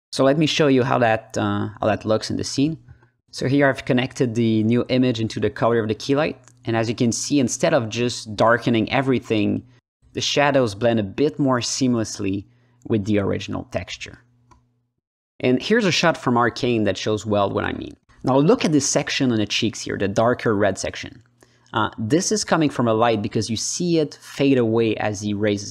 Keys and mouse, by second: 0.8 click, 2.7-4.9 drag, 5.6 click, 6.4 click, 6.9-8.8 drag, 9.0 click, 10.0 alt+middle click, 10.4 click, 11.2 alt+middle click, 11.7 click, 13.0-13.7 drag, 13.9 alt+middle click, 14.3-14.8 alt+middle drag, 18.7 click, 19.6 click, 20.6 ctrl+z, 21.1-23.2 drag, 23.5 ctrl+alt+middle click, 24.2-25.7 drag.